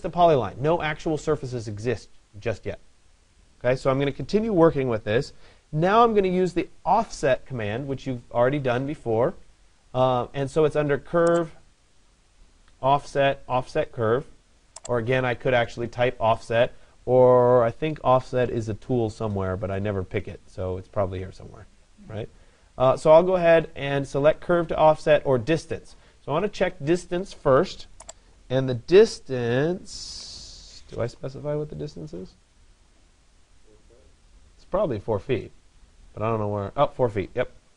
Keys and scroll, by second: 37.5 4.